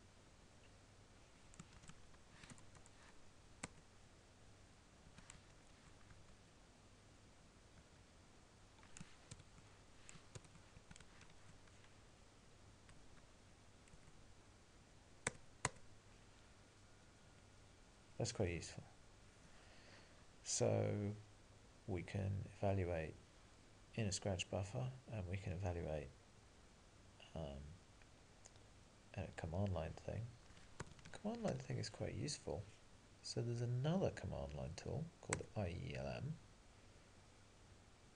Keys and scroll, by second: 2.0 Left, 2.5 alt+BackSpace, 3.7 Return, 5.6 alt+:, 6.1 Up, 11.3 ctrl+g, 11.3 ctrl+:, 11.8 Up, 14.0 Return, 30.5 alt+x.